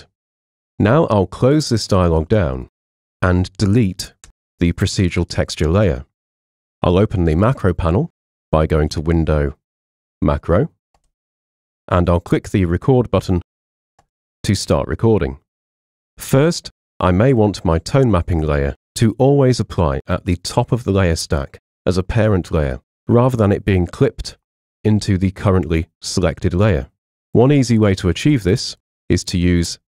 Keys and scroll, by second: 4.3 BackSpace.